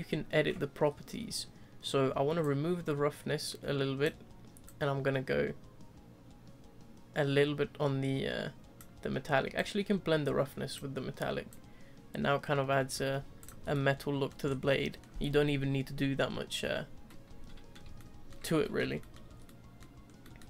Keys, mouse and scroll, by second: 2.6-7.7 drag, 9.7-13.4 drag, 13.6 scroll down 1, 13.7-14.4 middle drag, 14.4 scroll up 3, 14.7-18.4 middle drag, 18.4 scroll down 1, 18.6-19.3 middle drag, 19.3 scroll down 1, 19.4-20.0 middle drag, 20.0 scroll up 1, 20.2-20.4 middle drag.